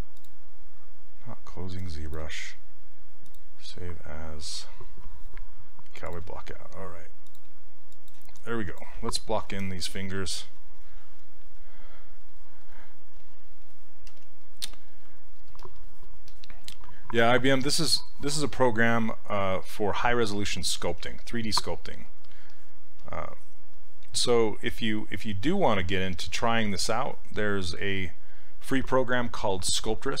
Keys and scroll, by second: 13.2 s, 14.1 s, 21.0 s.